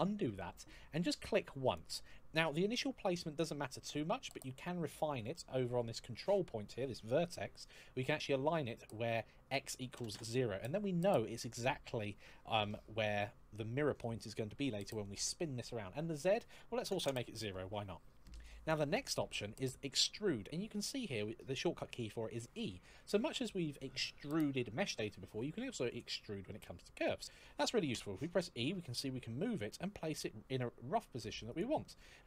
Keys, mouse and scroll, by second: 1.4 click, 9.2 click, 9.7 KP_0, 9.8 Return, 16.0 click, 16.6 KP_0, 16.8 Return, 27.7 e, 31.3 click, 31.9 e.